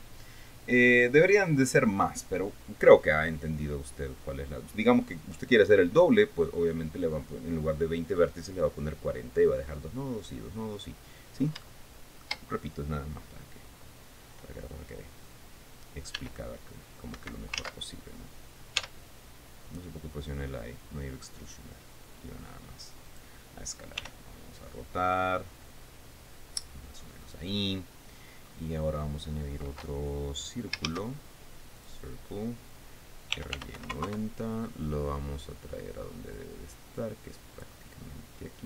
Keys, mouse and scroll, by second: 11.6-12.0 scroll up 1, 12.2 shift+middle click, 16.7 e, 17.7 Escape, 18.2 ctrl+z, 19.4 s, 23.6 click, 24.6 r, 27.8 click, 29.0 scroll down 2, 31.4 shift+a, 32.4 click, 33.6-34.6 typing, 34.6 KP_Enter, 35.5 scroll down 2, 37.0-38.4 drag.